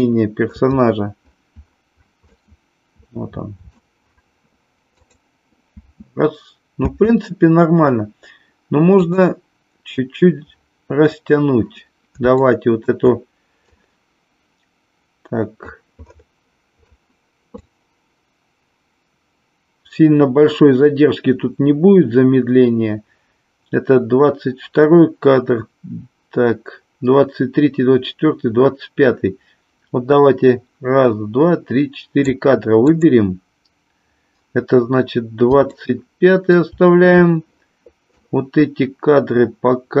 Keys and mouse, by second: 0.0-0.6 shift+middle drag, 2.3-3.7 middle drag, 5.1 click, 5.7 space, 6.8 space, 9.1 click, 12.5 shift+middle click, 13.6-15.7 drag, 17.6-32.3 drag, 32.8 click, 35.7 shift+middle click, 38.1-40.0 drag.